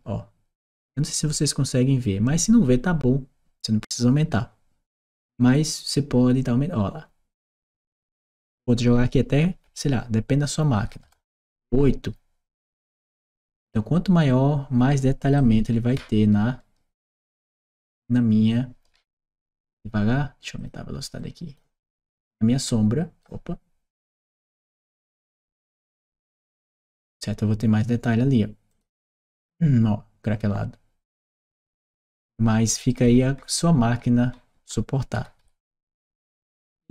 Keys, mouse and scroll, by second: 3.7 click, 4.8-8.2 drag, 8.4 click, 10.7 e, 10.9 Return, 15.2-19.3 right drag, 20.4 click, 21.0 click, 21.6-23.0 right drag, 24.1 click, 24.8 click, 25.3-27.6 right drag, 25.6 w, 28.5 click, 31.4 click, 32.7-35.6 right drag, 32.9 d, 33.9 s, 34.4 d, 35.0 w, 35.9 s.